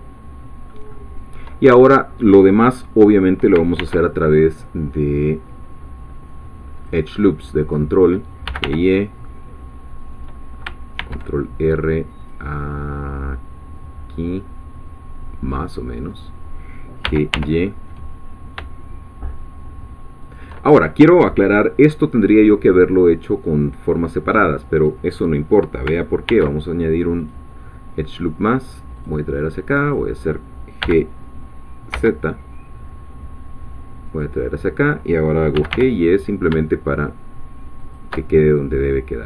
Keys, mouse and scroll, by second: 0.9 shift+middle click, 3.8 ctrl+r, 4.2 ctrl+click, 6.8 click, 7.7 click, 8.2-9.1 typing, 10.1 click, 11.0 ctrl+r, 12.2 click, 15.4 click, 16.2 click, 17.0 g, 17.3 y, 20.2 shift+click, 20.8 shift+scroll down 1, 24.8-25.3 scroll up 2, 26.3 ctrl+r, 27.2 click, 29.0 click, 30.8 g, 31.9 z, 34.1-35.5 drag, 35.3-36.2 typing, 37.8 shift+click, 38.8 middle click, 39.0 scroll down 2.